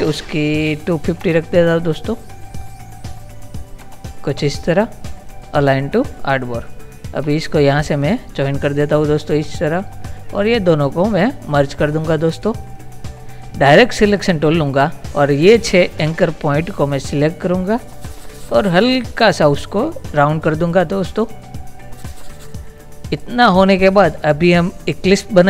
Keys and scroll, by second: 0.0-1.8 typing, 3.9 Return.